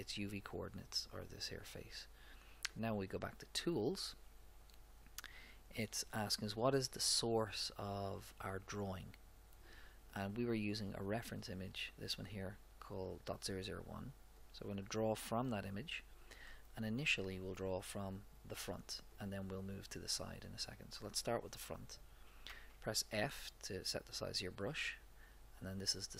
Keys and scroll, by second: 22.4 f.